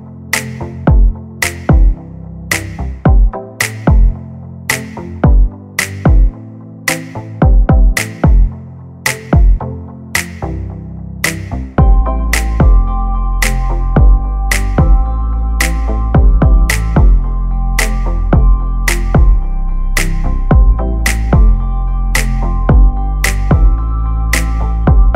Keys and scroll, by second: 11.4 2, 12.0 Return.